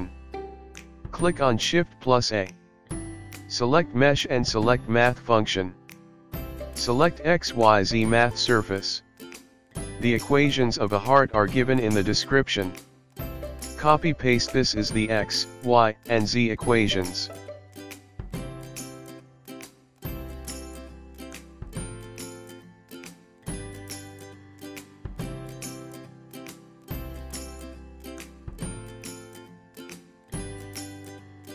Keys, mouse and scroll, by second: 1.0 shift+a, 9.6 click, 11.6 click, 13.3 click, 22.1 click, 25.3 click, 27.5 click.